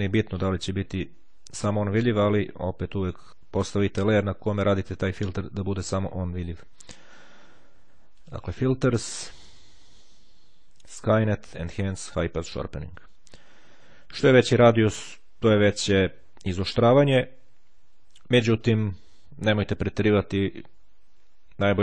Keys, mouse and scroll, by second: 2.7 click, 8.2 click, 12.3 click.